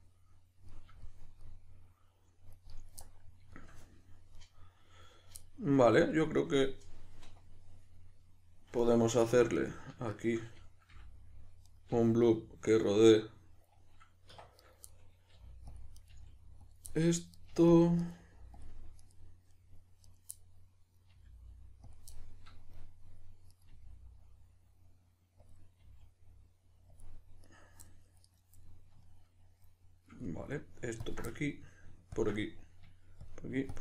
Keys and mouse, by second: 1.4-9.2 middle drag, 9.2 2, 9.5 right click, 10.1 shift+right click, 10.9 f, 11.6 right click, 11.8 f, 12.2-14.6 middle drag, 14.3 1, 14.6 right click, 14.9 middle click, 15.3 g, 15.8 click, 15.9 right click, 16.1 g, 16.7 click, 16.9-17.3 middle drag, 17.3 right click, 17.5 g, 17.7 click, 18.0 right click, 18.1 g, 18.6 click, 19.0 right click, 19.5-20.1 middle drag, 20.1 right click, 20.3-21.9 middle drag, 21.1 g, 21.9 click, 22.1-23.5 middle drag, 23.5 right click, 23.7 g, 25.5 click, 25.8 g, 27.0 click, 27.5 right click, 27.9-28.3 middle drag, 28.3 right click, 28.7-31.0 middle drag, 31.0 ctrl+drag, 31.3-32.1 middle drag, 32.1 ctrl+drag, 32.3-33.2 middle drag, 33.2-33.8 ctrl+drag.